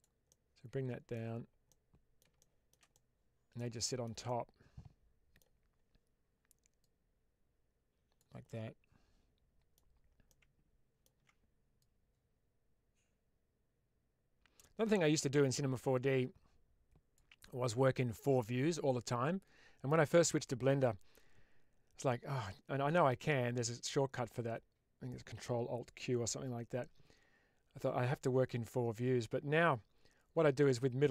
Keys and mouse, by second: 0.2-1.1 middle drag, 1.6-2.1 middle drag, 2.3-2.7 shift+middle drag, 2.8-3.4 middle drag, 3.8 shift+middle click, 4.1-5.3 middle drag, 6.7-8.1 drag, 8.3-9.6 middle drag, 10.2 alt+middle click, 11.7-14.5 drag, 16.0-17.1 drag, 30.9-31.1 middle drag.